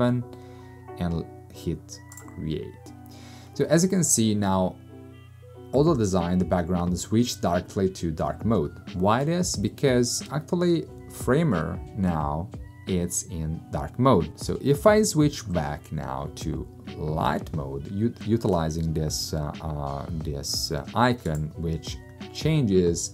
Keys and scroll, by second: 0.0-0.2 typing.